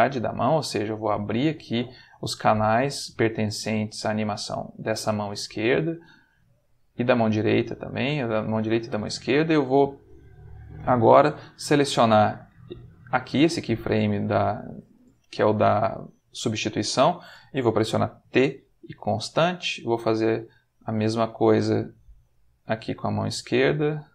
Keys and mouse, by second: 0.1 middle click, 1.0 click, 2.5 click, 3.0 middle click, 7.4 shift+click, 8.6-11.3 shift+middle drag, 11.9 click, 12.7 click, 18.2 t, 18.8 click, 20.0 click, 20.7 middle click, 22.4 click, 22.9 middle click, 24.0 click.